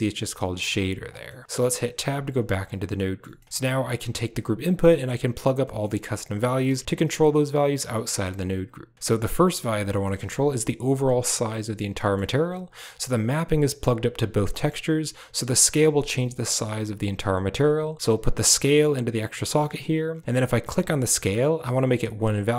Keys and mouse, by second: 0.7 click, 1.1 middle click, 1.8 Tab, 2.8 middle click, 3.2 middle click, 3.6 right click, 3.9 g, 4.8 middle click, 5.5 middle click, 6.6 Tab, 8.7 Tab, 8.9 Tab, 9.9 middle click, 11.8 click, 12.6-13.0 drag, 14.4 middle click, 18.1-19.1 drag.